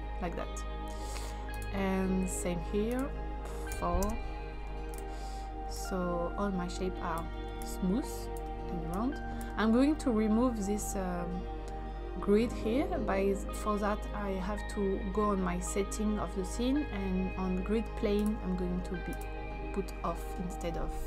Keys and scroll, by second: 3.6 4, 4.0 Return.